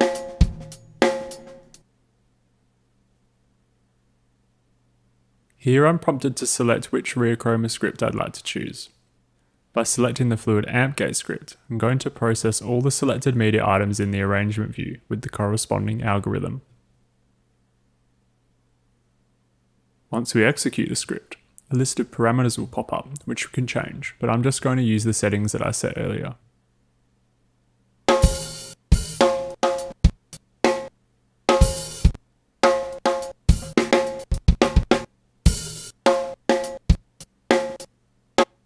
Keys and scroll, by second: 1.8 space, 27.5 w, 28.0 space, 38.4 space.